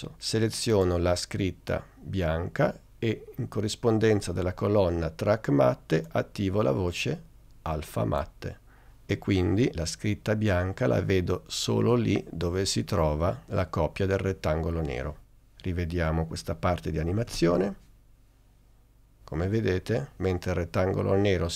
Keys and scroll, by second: 17.4 space.